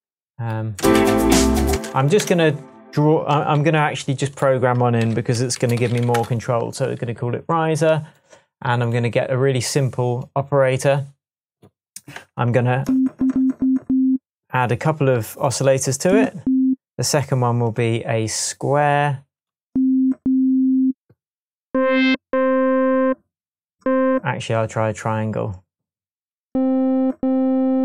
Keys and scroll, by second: 0.7 space, 1.7 space, 2.1 BackSpace, 3.5 t, 5.0-6.4 typing.